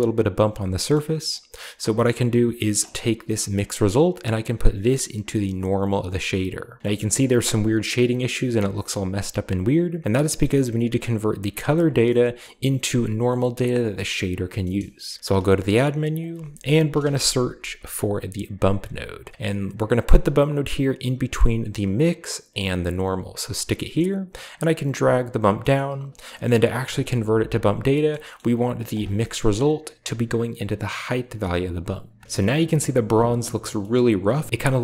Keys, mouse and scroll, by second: 0.3-2.0 scroll down 1, 0.8 middle click, 1.9 middle click, 2.0-3.0 scroll up 1, 3.1 click, 3.8-5.6 drag, 5.7 click, 6.8-7.9 scroll down 1, 7.9-9.4 scroll up 1, 9.4-10.0 scroll down 1, 9.9 middle click, 10.0-11.6 scroll up 2, 11.7-13.8 scroll down 2, 12.3-13.8 middle drag, 14.0 middle click, 14.1 scroll down 2, 14.3 scroll up 2, 14.5 middle click, 15.2 shift+a, 16.0 click, 16.8 typing, 18.4 click, 23.0 click, 23.4-24.3 scroll down 1, 24.5 click, 25.6-26.9 scroll up 1, 27.3-28.1 scroll down 1, 28.8-29.9 drag, 29.4-30.1 middle drag, 29.4-30.9 scroll up 2, 31.1-32.0 drag, 32.0 scroll down 1, 32.3-33.1 shift+middle drag, 33.2 scroll up 1, 33.9-34.5 shift+middle drag.